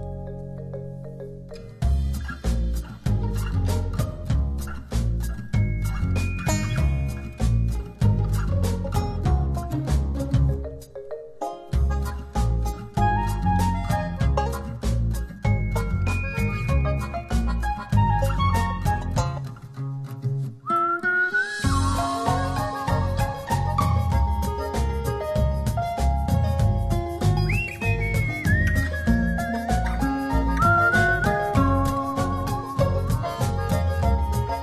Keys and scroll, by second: 2.9 4, 3.4 0, 3.7 Return, 14.7-16.1 typing.